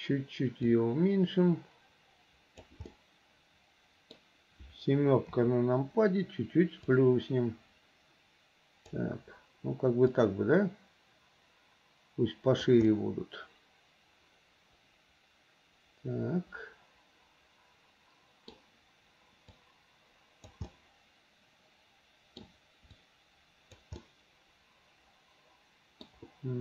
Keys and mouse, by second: 1.0-2.8 drag, 3.0-4.3 middle drag, 5.4 KP_7, 7.1-9.1 drag, 10.4-12.8 drag, 13.0 click, 13.3-14.5 middle drag, 14.5-18.4 drag, 14.5-18.4 right drag, 18.4 middle click, 19.6-20.6 drag, 20.9-22.6 middle drag, 23.1 click, 24.1-26.2 middle drag.